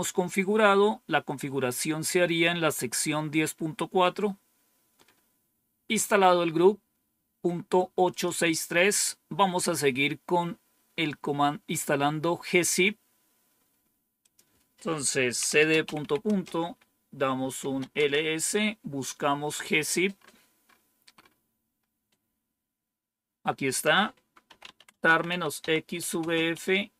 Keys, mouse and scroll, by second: 3.8-4.7 scroll down 2, 4.9-5.5 scroll down 2, 6.2 scroll up 1, 8.0 click, 14.1 click, 15.1-18.2 typing, 19.8-20.5 typing, 20.0-22.2 scroll up 2, 22.2-24.2 scroll up 1, 24.1-26.9 typing.